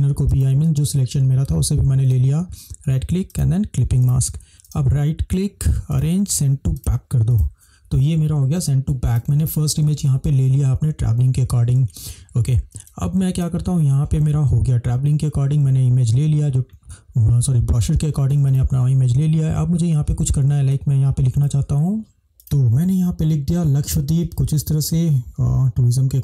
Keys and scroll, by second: 9.0 space, 12.8 space, 20.7 space.